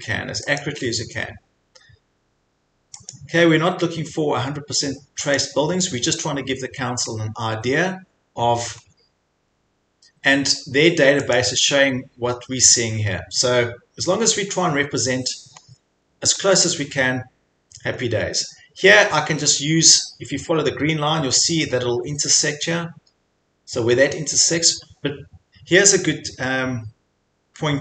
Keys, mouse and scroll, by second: 0.6 click, 3.1 click, 5.3 click, 7.1 scroll down 3, 8.0 scroll up 4, 8.3-8.9 scroll, 11.4 click, 11.6-12.8 scroll, 15.6 scroll, 16.4 scroll, 17.9-18.4 scroll.